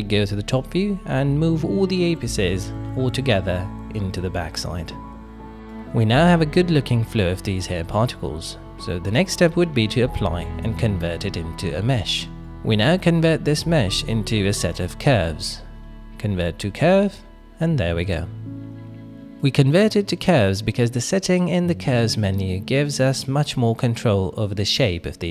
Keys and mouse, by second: 0.9 shift+middle click, 1.5 click, 5.7-6.4 middle drag, 7.0-8.3 middle drag, 9.6 click, 11.1 click, 11.6 F3, 14.7 BackSpace, 14.8 BackSpace, 18.1-18.7 middle drag, 18.7 click, 19.4 middle click, 20.2 click, 21.2 click, 22.2 shift+middle click, 22.4-23.5 middle drag, 23.7 shift+middle click, 24.1 ctrl+middle drag, 24.6 middle click.